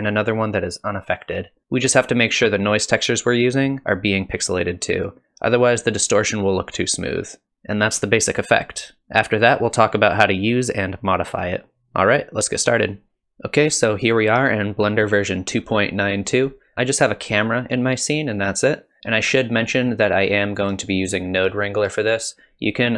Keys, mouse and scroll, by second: 1.9 shift+click, 5.6-6.1 scroll up 5.